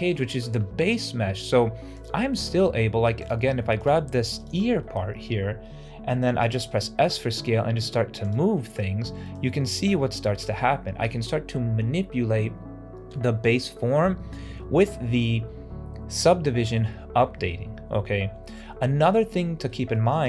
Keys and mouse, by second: 2.2 middle click, 3.1 click, 4.3 shift+click, 4.7 shift+middle click, 6.9 s, 8.4 middle click, 9.2-10.5 drag, 16.5 middle click, 17.3 ctrl+z, 17.5 ctrl+z, 17.7 ctrl+z, 18.5 Tab, 19.1 middle drag, 19.3 click, 19.8 shift+click.